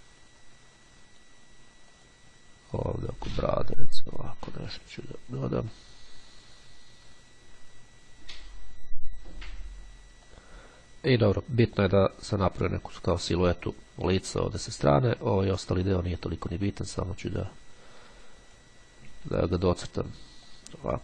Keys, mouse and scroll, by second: 2.1 click, 2.9-4.8 drag, 5.9-9.1 drag, 10.5 click, 11.3 click, 12.3-14.5 drag, 15.3-15.9 scroll down 1, 16.9-19.2 drag, 19.3-19.9 ctrl+scroll down 2, 20.7-21.0 drag.